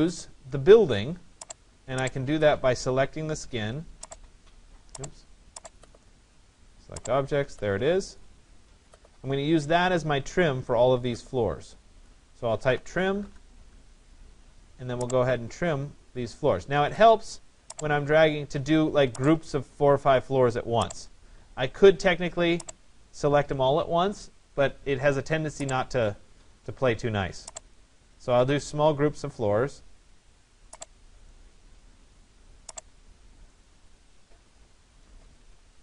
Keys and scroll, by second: 12.8 Return, 34.8 Escape.